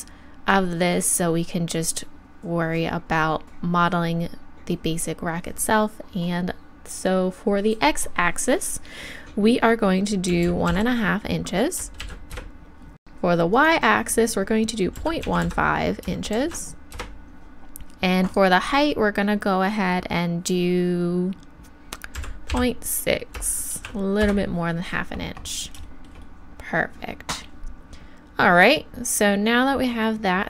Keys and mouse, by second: 18.3-30.4 drag.